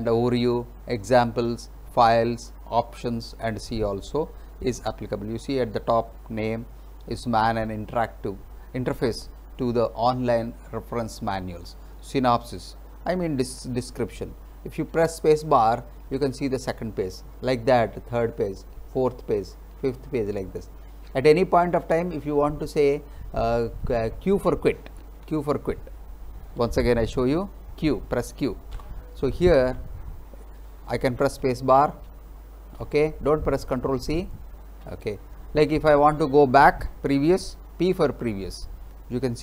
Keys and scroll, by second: 15.6 space, 17.8 space, 25.2 q, 27.2 Up, 28.8 Return, 31.3 space, 34.8 space, 37.9 p.